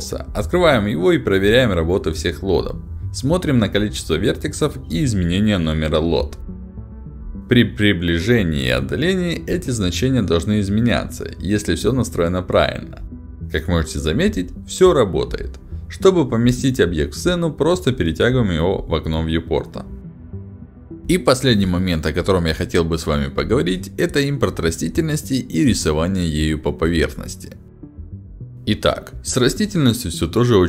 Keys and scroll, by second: 3.1 ctrl+alt+d, 11.3 w, 11.8 d, 11.8 s, 15.3 s.